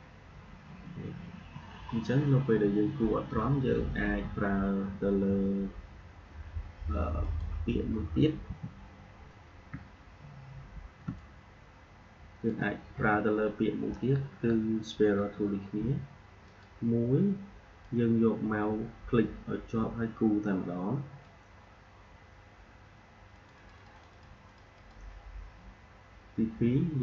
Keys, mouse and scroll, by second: 1.8-3.4 alt+scroll down 1, 4.0 Delete, 7.1 click, 8.4 Delete, 9.8 alt+scroll up 1, 11.0 space, 11.1 click, 11.4 space, 16.4-26.9 drag.